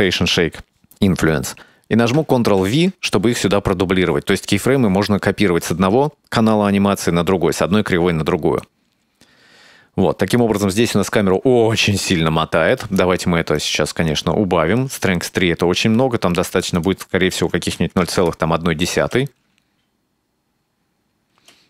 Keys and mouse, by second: 2.6 ctrl+v, 8.6-12.8 drag, 13.6 right click, 15.0-16.7 drag, 16.8-18.4 drag, 18.8 click, 19.0 space, 21.4 space.